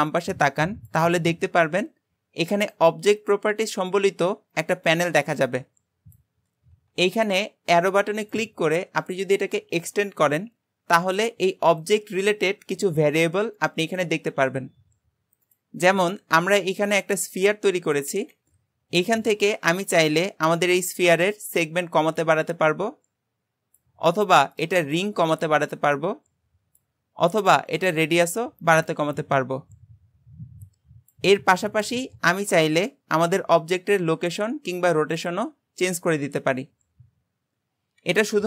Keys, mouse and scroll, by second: 8.3-18.4 drag, 20.0-23.1 drag, 24.6-30.5 drag.